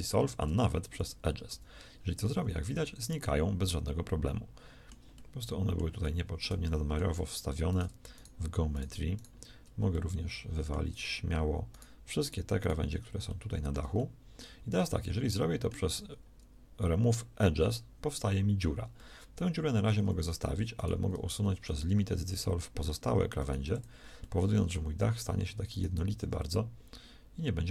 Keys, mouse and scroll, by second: 0.1 x, 1.5 z, 2.5 z, 15.3 z, 16.2 x, 21.3 x, 23.6 x.